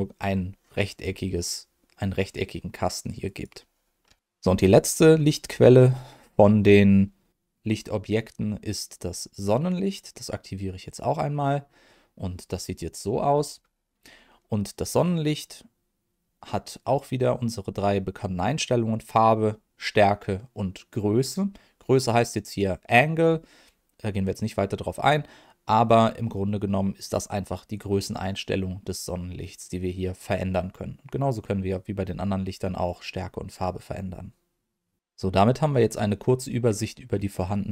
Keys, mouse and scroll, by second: 3.2 click, 7.3 click, 9.3 click, 10.9 click, 13.2 scroll down 1, 13.9 scroll down 2, 16.6-17.1 scroll up 1, 27.2-30.5 drag, 31.1-32.8 drag.